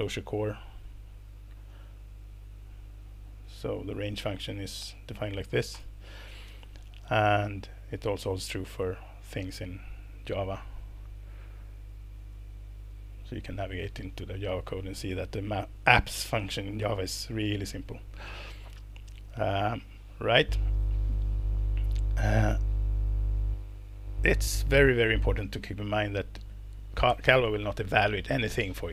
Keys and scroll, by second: 5.7 ctrl+-.